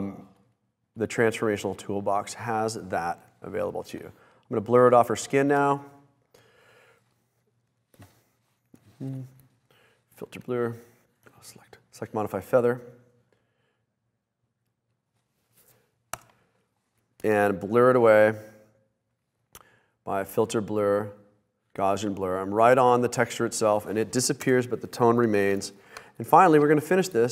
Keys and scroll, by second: 16.3 Return, 24.6 Return, 26.4 super+-, 27.2 super+d.